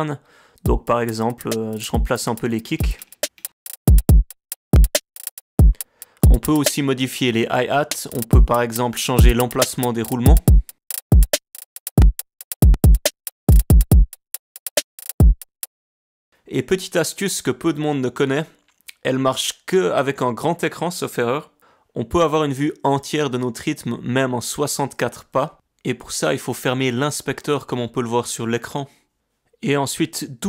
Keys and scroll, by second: 0.6 space, 8.4 ctrl+alt+r, 15.7 space, 16.1 alt+4, 29.3 i.